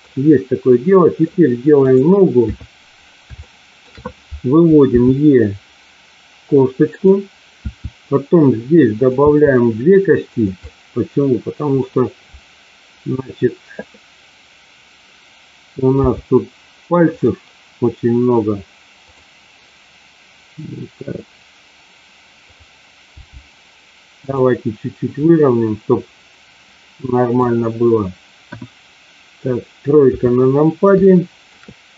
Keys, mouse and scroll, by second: 0.7 middle click, 2.4 KP_3, 3.4 shift+middle click, 4.9 e, 6.9 click, 7.5 e, 8.9 click, 10.3 click, 10.3 e, 10.5-11.8 middle drag, 16.0 g, 19.0 click, 22.4 click, 23.0 g, 24.2 click, 25.2-27.3 middle drag, 28.4 KP_1, 30.0 KP_3, 31.0 shift+middle click.